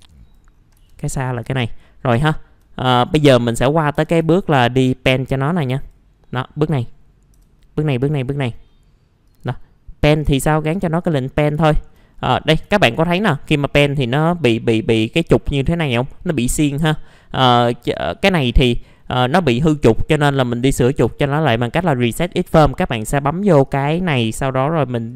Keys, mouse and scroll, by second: 0.5-1.3 scroll up 2, 1.3 scroll down 1, 1.5 alt+middle click, 3.1 click, 3.7-4.7 typing, 3.9 click, 4.4 middle click, 4.5 scroll down 1, 5.5-6.8 drag, 7.3 g, 8.5 scroll up 1, 9.2 click, 10.2 b, 11.6 alt+middle click, 12.7-15.8 alt+middle drag, 17.8 right click, 18.5-24.8 drag.